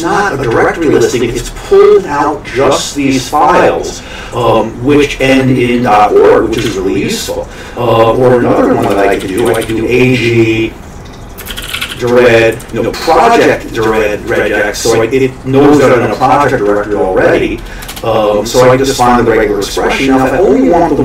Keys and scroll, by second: 6.6 q, 8.9 Escape, 8.9-10.1 typing, 11.3-12.4 typing, 12.6 Down, 17.9 Return.